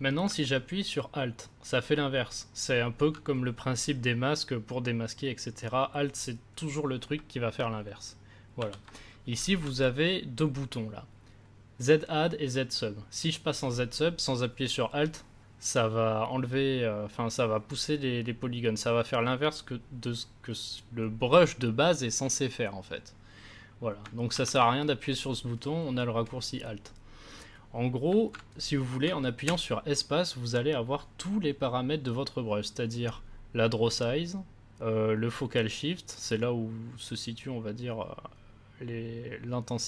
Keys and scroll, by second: 8.5 ctrl+z, 9.5 ctrl+z, 24.3 ctrl+z, 29.4 space.